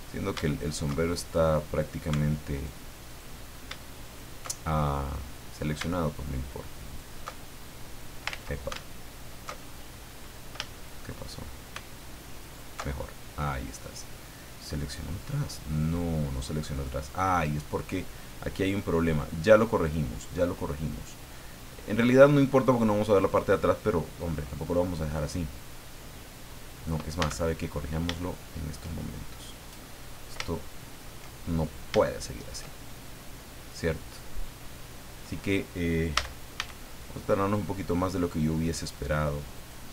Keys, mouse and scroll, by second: 0.4 alt+shift+right click, 0.9-1.4 alt+shift+scroll up 1, 2.5 alt+right click, 3.1 alt+right click, 4.0 alt+shift+right click, 4.8-5.5 alt+shift+scroll up 1, 6.8 alt+shift+right click, 7.8-8.1 scroll down 2, 8.3 ctrl+z, 9.6-10.0 alt+shift+scroll up 3, 10.7 shift+middle click, 11.2 shift+middle click, 12.4 alt+shift+right click, 12.9-13.8 scroll down 3, 14.1-15.2 middle drag, 15.2 scroll down 2, 15.7 click, 16.6 click, 18.6-22.4 drag, 23.2 scroll down 2, 23.5-24.5 drag, 25.2-27.2 drag, 27.2 a, 27.6-28.0 scroll up 1, 28.2 shift+middle click, 29.9 middle click, 30.5 shift+middle click, 32.0 shift+middle click, 36.1 a, 39.5 right click.